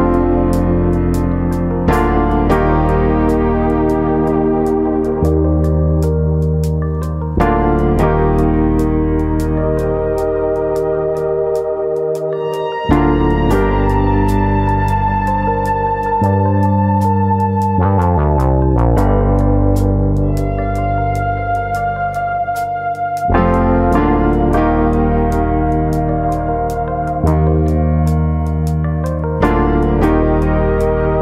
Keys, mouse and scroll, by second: 0.0 ctrl+click, 0.4 middle click, 1.6 g, 2.6 click, 3.2 alt+click, 3.5 middle click, 4.0-5.0 scroll up 3, 4.2 middle click, 6.2 click, 6.6 shift+click, 7.1 shift+click, 8.3 3, 8.9 click, 9.2 shift+click, 9.5 shift+click, 10.8 shift+click, 12.7 shift+click, 13.4 middle click, 15.3 i, 19.8 click, 20.6 i, 22.1 click, 22.3 middle click, 22.8 scroll up 1, 23.0 shift+middle click, 23.3 middle click, 23.8 middle click, 24.5 shift+middle click, 24.8 e, 25.8 click, 25.9 middle click, 26.3-26.9 scroll down 3, 26.6 middle click, 27.3-28.2 scroll up 3, 27.7 middle click, 28.6 KP_3, 29.6 click, 30.6 e.